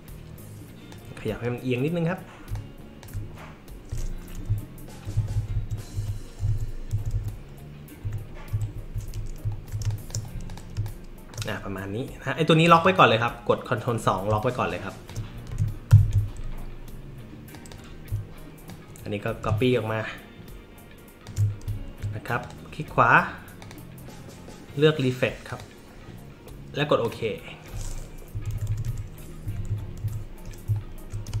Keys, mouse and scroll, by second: 2.5 alt+click, 4.4 Up, 5.1 Left, 5.9 Up, 6.4 Down, 6.4 Left, 6.9 Left, 7.1 Left, 8.0 Right, 8.5 Up, 9.8 space, 9.9 click, 10.5 click, 10.7 space, 10.8-11.3 drag, 12.7 click, 14.3 space, 14.4 click, 15.9 ctrl+KP_2, 17.5 click, 18.7-21.2 alt+drag, 21.7 alt+middle click, 21.7-22.4 alt+scroll up 1, 22.4 click, 23.6 click, 25.5 click, 27.0 click, 28.3 Left, 28.5 Left, 28.7 Left, 28.8 Left, 29.4 Right, 29.7 Right, 30.0 Up, 30.8-31.4 alt+middle drag, 30.8-31.1 alt+scroll up 1, 31.3 space.